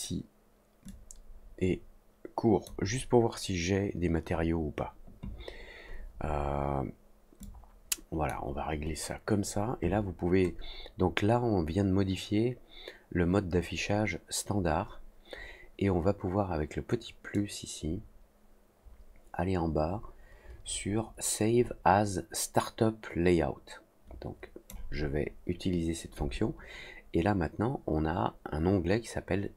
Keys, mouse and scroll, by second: 0.8-2.6 drag, 7.4 click, 17.3-24.6 drag.